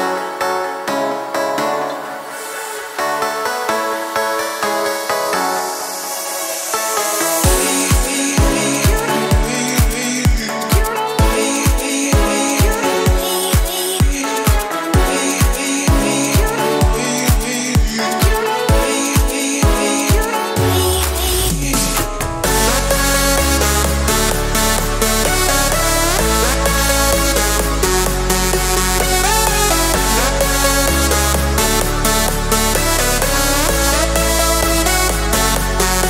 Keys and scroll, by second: 9.5-10.9 typing, 13.0 ctrl+z, 14.1 Escape, 18.1 Escape.